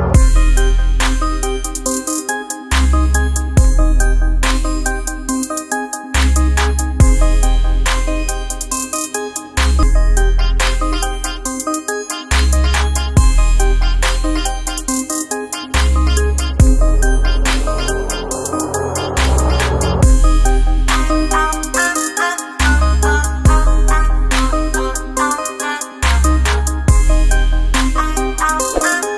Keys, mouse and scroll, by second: 2.8 double click, 15.9 ctrl+click, 16.6 ctrl+right click, 25.0 double click.